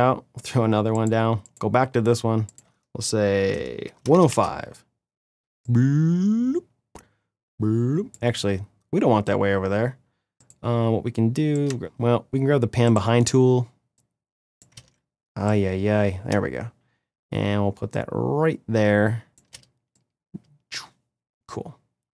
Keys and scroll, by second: 3.4-4.3 typing, 14.4 ctrl+z.